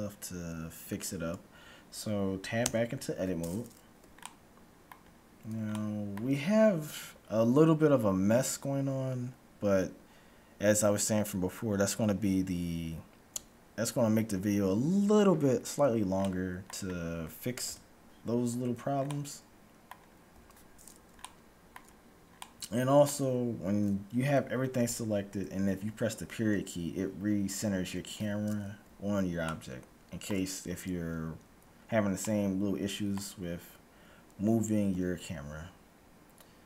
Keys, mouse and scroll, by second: 2.7 Tab, 4.3-7.7 middle drag, 15.8-16.2 scroll down 1, 16.2 middle click, 17.7 KP_Decimal, 18.2-19.2 scroll down 1, 20.5 a, 20.8 scroll up 1, 21.0-24.3 middle drag, 24.3-25.5 scroll up 1, 24.8 a, 26.5 KP_Decimal, 27.5-28.2 scroll up 1, 28.2-29.3 scroll up 1, 29.3 scroll up 1, 29.5-33.8 middle drag, 34.8 a.